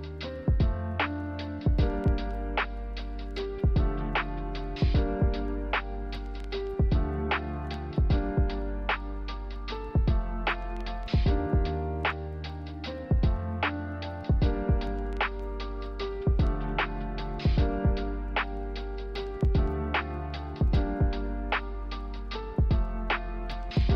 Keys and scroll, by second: 4.0-5.8 typing, 16.2-17.2 typing, 18.7-19.4 typing.